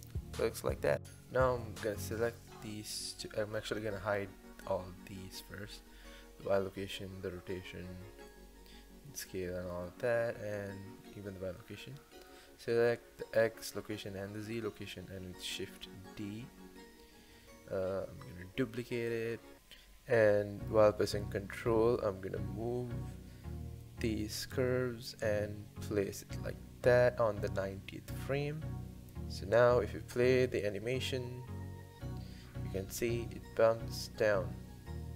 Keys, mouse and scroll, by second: 1.1 space, 2.0 click, 6.3 click, 8.9 x, 10.3 click, 11.1 x, 12.5 click, 21.6 shift+d, 31.6 click, 32.0 space, 34.0 space.